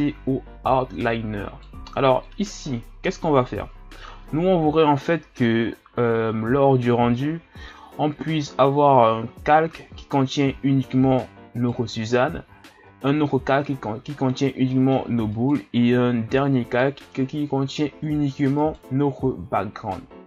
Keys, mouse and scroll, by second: 3.2 click, 4.9-5.7 middle drag, 5.7-6.5 scroll down 3, 6.5-7.2 scroll down 3, 7.2-8.0 middle drag, 8.0-8.4 ctrl+scroll down 4, 8.6-9.5 scroll up 5, 10.5 shift+scroll up 1, 11.7 right click, 14.7-15.3 middle drag, 15.3 right click, 16.1 ctrl+scroll up 3, 18.8 right click.